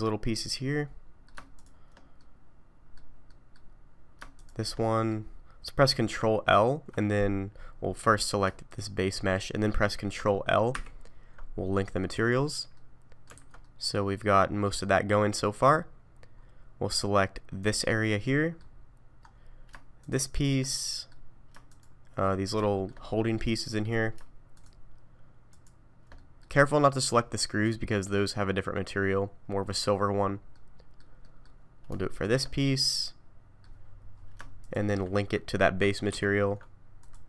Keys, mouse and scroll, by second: 0.3 middle click, 1.5 shift+click, 2.2 middle click, 3.3 middle click, 4.4 shift+click, 4.8 middle click, 7.3-7.9 scroll down 4, 7.9 middle click, 8.7 shift+click, 10.7 ctrl+l, 12.8 middle click, 13.4 alt+a, 13.6 middle click, 15.7 scroll up 3, 16.4 scroll down 2, 17.6 click, 18.2 middle click, 19.2-19.7 scroll up 2, 20.0 shift+click, 20.7 middle click, 21.7 shift+click, 22.2 middle click, 22.6 shift+middle click, 23.0 scroll up 1, 23.5 middle click, 24.5 shift+click, 25.5 shift+click, 26.1 middle click, 30.2 scroll down 1, 30.5 middle click, 31.2 middle click, 32.1 shift+click, 32.5 middle click, 34.6 shift+click, 36.1 ctrl+l.